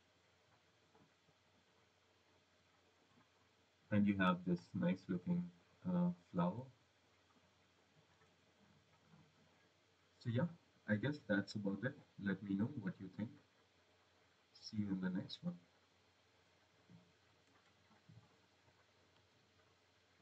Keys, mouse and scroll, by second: 0.8 click, 3.8 click, 4.6 scroll, 5.4 click, 8.0 click, 12.4 click.